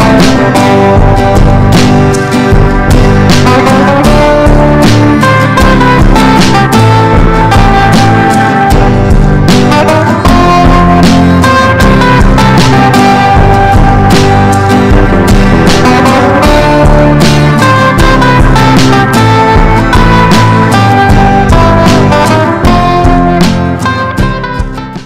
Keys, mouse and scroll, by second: 9.3 Escape.